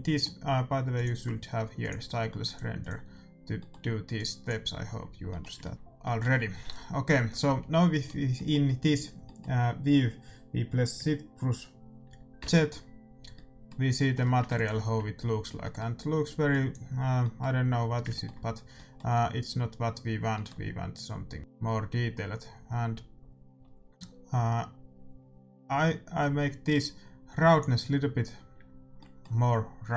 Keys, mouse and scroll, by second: 0.9-5.7 drag, 3.5-12.5 middle drag, 12.5 shift+z, 13.3-14.4 middle drag, 14.4 ctrl+s, 16.4-19.4 drag, 19.6-21.4 middle drag, 21.4 click, 28.9-29.9 middle drag.